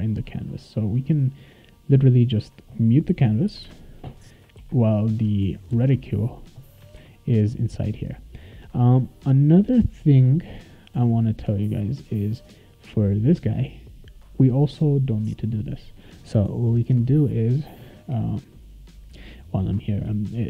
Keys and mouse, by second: 0.4 click, 2.4 click, 3.5 /, 3.6 /, 4.6 ctrl+s, 7.0 ctrl+s, 11.8-15.1 drag.